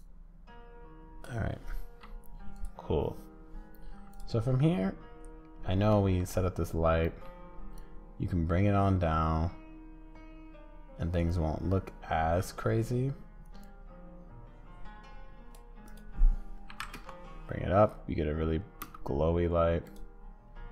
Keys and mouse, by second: 0.0-1.2 drag, 2.5 click, 6.0 middle click, 7.1 middle click, 15.9-17.7 drag, 18.8 space.